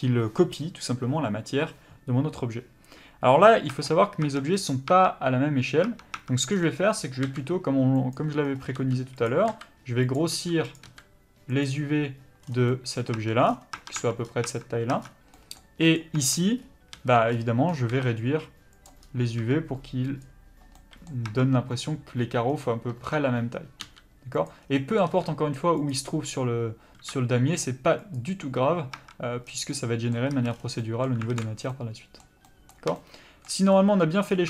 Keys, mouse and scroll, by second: 4.6 click, 4.9 Tab, 5.9 Tab, 7.3 s, 8.8 g, 9.2 click, 9.5 s, 10.5 g, 10.7 click, 10.9 s, 12.4 scroll down 1, 12.7 middle click, 13.2 Tab, 13.4 scroll down 1, 13.8 Tab, 14.2 scroll up 1, 14.5 Tab, 15.0-15.3 scroll up 1, 15.3 middle click, 16.0 click, 16.1 Tab, 16.9 a, 17.9 s, 20.7 middle click, 21.3 Tab, 21.8-22.5 scroll up 1, 22.5-22.9 scroll down 1, 22.9 Tab, 23.8 g, 25.9 click, 27.0 s, 28.9 Tab, 29.5 scroll down 1, 29.7 middle click, 30.3 a, 30.5 scroll down 1, 30.8 middle click, 31.3 alt+a, 31.7 middle click, 34.3 scroll up 1.